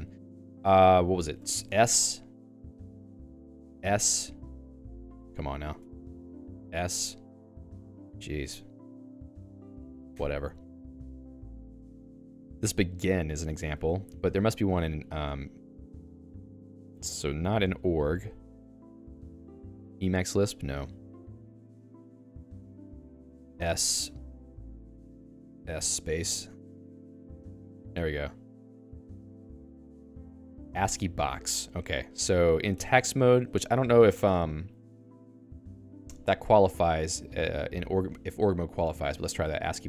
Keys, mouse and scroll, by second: 1.1 ctrl+s, 1.3-2.2 typing, 2.8 Escape, 2.9 Escape, 3.3 ctrl+s, 3.9 s, 4.5 space, 5.3 Escape, 5.7 ctrl+s, 5.9-7.2 typing, 7.8 ctrl+g, 8.4 ctrl+s, 8.8 (, 9.1 s, 9.5 Escape, 9.9 ctrl+g, 10.1 Escape, 10.5 j, 11.7-14.2 typing, 17.0 k, 17.3 k, 18.5 ctrl+u, 19.3 ctrl+u, 20.0 k, 20.7 k, 20.9 k, 21.0 ctrl+d, 21.4 ctrl+d, 22.5-33.0 typing, 27.2 Return.